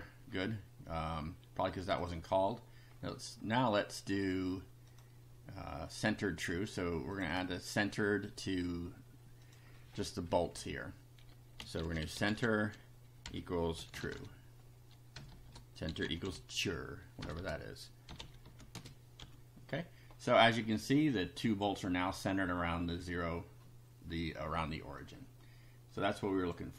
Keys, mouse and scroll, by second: 0.3 scroll down 2, 1.8 click, 2.5-3.1 scroll up 2, 3.5 scroll up 1, 4.9 click, 7.1 click, 9.4 click, 10.5 Left, 11.3-19.0 typing, 19.2 F5, 21.1 click, 25.0-26.7 drag.